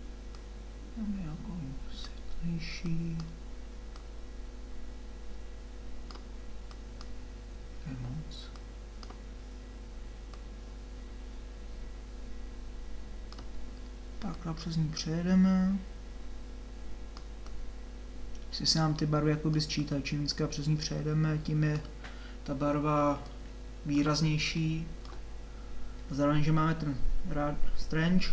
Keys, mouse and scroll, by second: 2.9-22.7 drag, 22.7-28.3 middle drag.